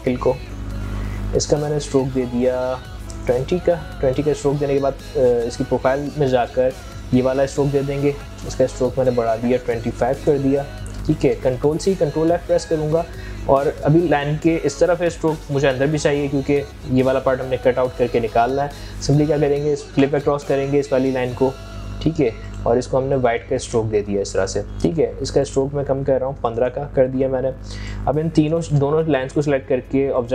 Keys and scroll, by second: 2.4 ctrl+a, 9.3 ctrl+a, 11.5 ctrl+c, 11.9 ctrl+f, 25.6 ctrl+a.